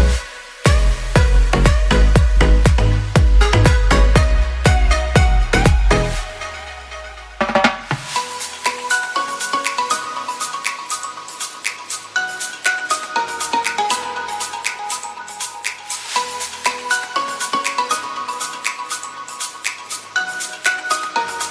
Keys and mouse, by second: 0.0 Tab, 0.7 ctrl+s, 1.3 shift+middle click, 2.0-2.3 middle drag, 2.6-3.1 shift+middle drag, 3.2 click, 3.8 Tab, 10.7 Tab, 11.1 ctrl+s, 11.4-12.3 drag, 12.7-13.2 shift+drag, 13.3 Tab, 13.8 Tab, 14.1 a, 14.5 a, 14.8 Tab, 15.8 3, 16.4 click, 16.7 shift+click, 17.2 shift+click, 17.6 shift+click, 18.2 ctrl+l, 19.0 shift+middle click, 19.8 s, 21.0 a.